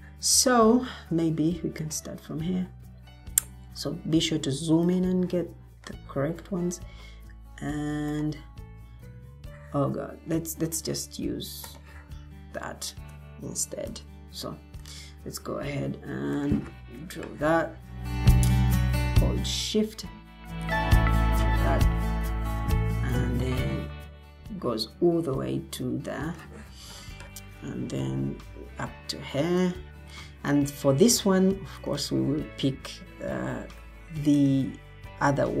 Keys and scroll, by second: 3.5 Escape, 13.8 Delete.